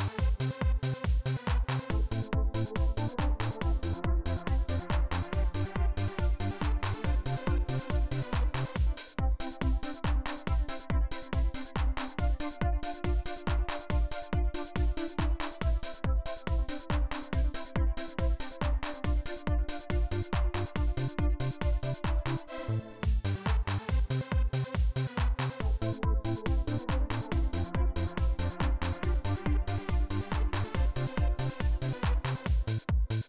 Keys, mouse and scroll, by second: 0.6-1.8 drag, 3.0-4.2 drag, 5.4 click, 7.3 click, 8.2 click, 8.8 click, 10.1 click, 10.9 click, 11.4 right click, 12.4-13.3 drag, 14.3-15.3 drag, 17.4 click, 18.5 click, 19.4 click, 21.4 click, 22.0 right click, 23.0 click, 26.7 click, 30.7-33.2 drag.